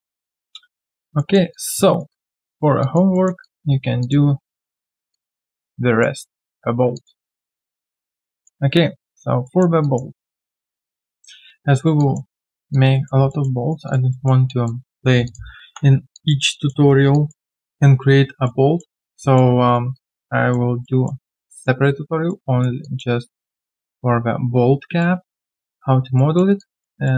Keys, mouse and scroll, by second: 0.1 alt+right click, 0.4 alt+click, 0.6 alt+right click, 0.8 alt+click, 1.1 alt+middle click, 1.5 alt+click, 1.9 alt+right click, 2.1 alt+click, 2.5 alt+middle click, 2.8 alt+click, 3.1 alt+middle click, 3.2 alt+scroll down 1, 3.4 alt+click, 5.6 alt+click, 6.8 alt+click, 6.9 alt+click, 7.2 alt+middle click, 7.5 alt+right click, 7.8 alt+middle click, 8.1 alt+right click, 8.3 alt+click, 8.6 alt+scroll down 1, 9.0 alt+right click, 9.4 alt+middle click, 9.8 alt+click, 10.1 alt+middle click, 10.4 alt+right click, 12.0 alt+click, 12.3 alt+middle click, 12.7 alt+click, 13.3 alt+middle click, 13.6 alt+right click, 13.8 alt+click, 14.1 alt+middle click, 14.4 alt+click, 14.9 alt+right click, 15.6 3, 16.1 alt+click, 16.5 alt+middle click, 16.8 alt+right click, 17.1 alt+click, 17.4 alt+middle click, 17.5 alt+click, 18.4 alt+middle click, 19.6 alt+right click, 19.9 alt+click, 20.8 alt+middle click, 21.3 alt+click, 22.3 alt+middle click, 22.8 alt+click, 25.0 alt+middle click, 26.1 alt+middle click, 26.6 alt+click, 27.0 alt+middle click.